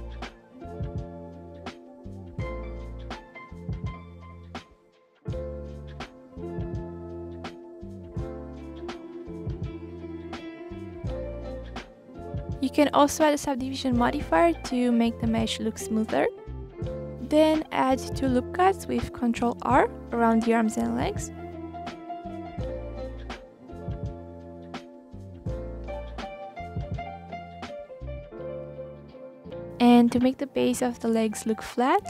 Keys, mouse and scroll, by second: 0.0 click, 0.4 s, 1.8 click, 3.1 click, 4.7 click, 6.6 click, 6.8-7.4 scroll up 2, 7.4 middle click, 7.7 click, 8.2 click, 9.5 click, 9.6 middle click, 10.6 shift+click, 11.0 click, 12.9-13.2 drag, 13.9-15.7 drag, 16.3 click, 17.0-18.5 drag, 18.7 ctrl+r, 22.8 ctrl+z, 22.9 middle click, 23.1 scroll up 1, 23.4 click, 24.0 click, 24.4 click, 24.6 scroll down 1, 24.9 s, 25.8 ctrl+z, 26.7 s, 31.4 click, 31.6 s.